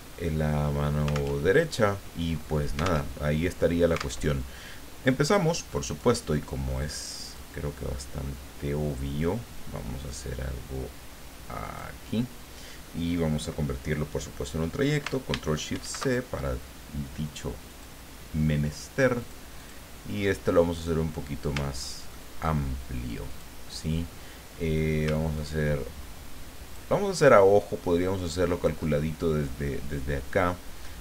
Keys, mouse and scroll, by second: 1.3 alt+Tab, 3.1 alt+Tab, 4.2 alt+Tab, 5.9 click, 7.3-11.9 drag, 15.7 ctrl+shift+c, 17.7 click, 19.2 click, 19.6 click, 21.8-22.2 ctrl+scroll up 2, 23.3 click, 25.3-27.1 ctrl+drag, 27.4-28.8 ctrl+drag.